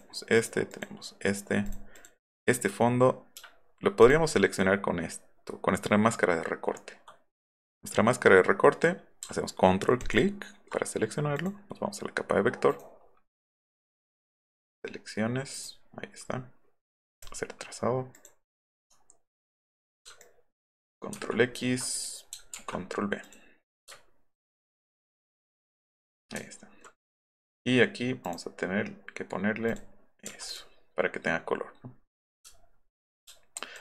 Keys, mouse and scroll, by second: 4.0 ctrl+click, 12.7 right click, 13.4 click, 14.3 click, 15.5 click, 17.1 click, 18.1 click, 19.8 click, 20.2 ctrl+click, 21.1 ctrl+x, 22.7 ctrl+v, 23.3 click, 24.0 alt+middle click, 24.1 alt+middle click, 24.9 click, 26.5 alt+middle click, 28.3 click, 29.7 click, 30.5 click, 32.5 alt+middle click, 32.8 alt+middle click, 33.6 ctrl+click.